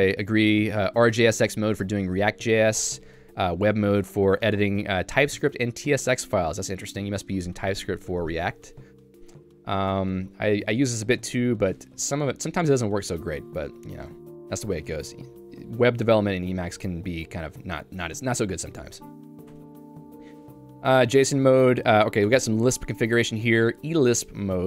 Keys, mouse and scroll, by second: 6.4-7.8 l, 8.3 k, 9.3 j, 10.7 k, 13.5 j, 16.2 k, 18.6 Home, 19.5 Tab, 20.2 j, 22.0 k, 22.3 Tab, 22.7 j, 24.2 k.